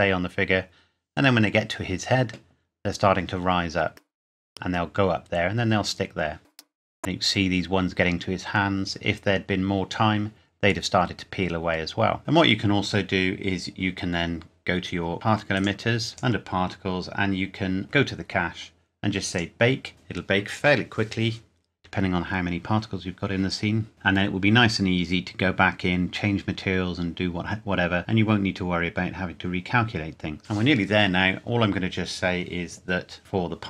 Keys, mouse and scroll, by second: 6.6 middle click, 12.2-12.7 scroll down 1, 14.2-14.5 scroll down 1, 14.8-15.2 scroll up 1, 15.5 click, 16.7-17.7 scroll down 1, 17.7 scroll up 1, 17.8 click.